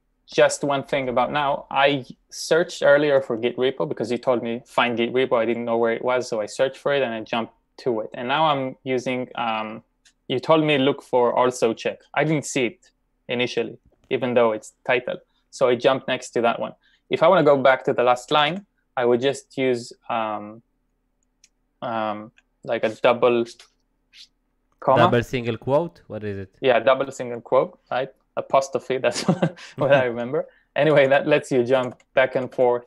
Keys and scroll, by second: 18.4 typing, 30.9-32.5 typing.